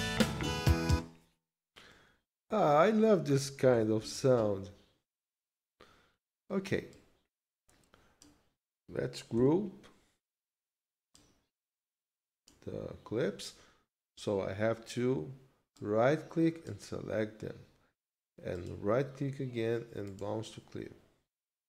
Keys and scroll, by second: 0.9 space, 4.0 ctrl+s.